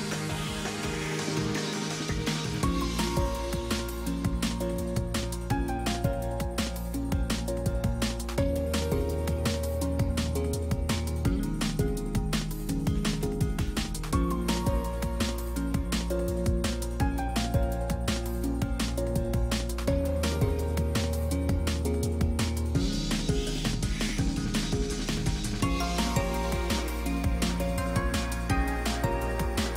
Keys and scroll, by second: 9.2 space.